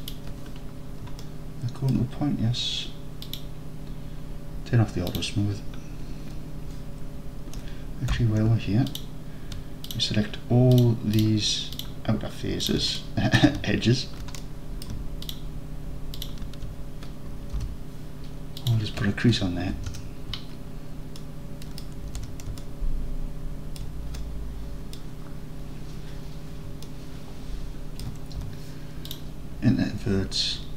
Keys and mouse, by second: 0.0 click, 1.2 alt+click, 3.3 click, 5.2-8.2 drag, 8.2 2, 8.9 alt+click, 12.7 alt+shift+drag, 13.0 middle drag, 13.3 middle click, 14.4-14.9 alt+middle drag, 15.3 alt+shift+drag, 17.6 n, 18.8-21.9 drag, 22.1 alt+z, 22.7-23.8 alt+drag, 24.2-25.0 drag, 26.9-27.4 alt+drag, 27.5 alt+click, 27.8 alt+click, 28.4 1.